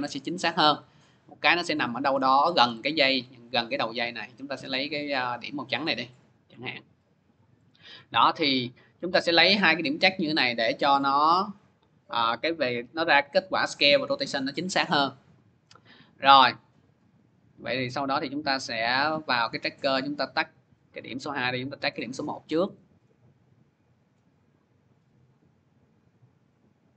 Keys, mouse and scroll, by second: 1.7 scroll down 2, 1.7 click, 2.0 scroll, 2.5 click, 2.5-4.0 scroll, 6.3 click, 6.9 middle click, 7.0 middle click, 7.7 middle click, 12.0 scroll, 16.1 scroll, 17.3 click, 17.3 scroll, 18.5 click, 19.3 click, 20.5 middle click, 20.5 click, 21.2 middle click, 21.8 middle click, 22.0 middle click, 22.5 middle click, 22.7 scroll, 23.5-23.9 scroll, 25.1 click, 25.5 scroll, 26.7 scroll.